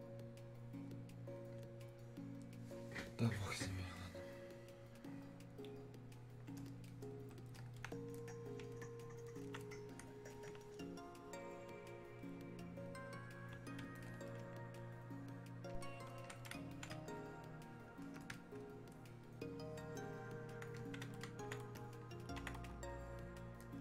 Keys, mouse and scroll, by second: 14.0-22.9 ctrl+drag, 22.9-23.8 ctrl+drag.